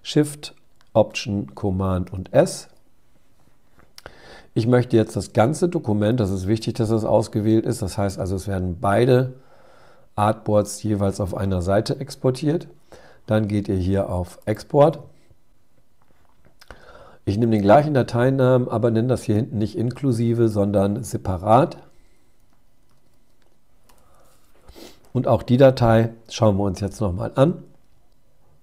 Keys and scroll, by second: 1.0 alt+shift+super+s, 26.9 super+Tab.